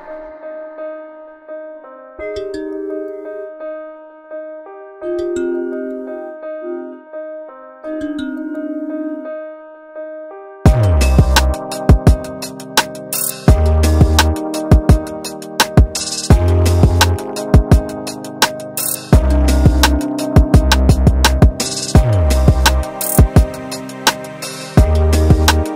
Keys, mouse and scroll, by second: 0.0 shift+middle click, 0.2-0.6 scroll up 5, 0.8 ctrl+click, 1.5 ctrl+z, 2.2 shift+click, 2.9 shift+click, 3.5 shift+click, 3.6-4.1 scroll down 2, 3.8 Tab, 4.2 Tab, 4.3-4.8 scroll down 4, 4.8 click, 5.3 middle click, 5.5-5.9 scroll up 2, 5.9 click, 6.3 click, 6.6 alt+click, 6.7 alt+click, 7.1 middle click, 7.7-8.2 scroll up 6, 8.3 shift+click, 8.9 shift+click, 9.3 ctrl+z, 9.7 ctrl+z, 10.2 shift+click, 11.0 shift+click, 11.4-12.4 scroll down 1, 12.4 scroll down 2, 12.4 e, 16.7-17.7 scroll down 4, 17.2 shift+z, 17.7 middle click, 20.3-21.9 scroll up 7, 20.6 shift+middle click, 22.1 g, 25.4 Escape.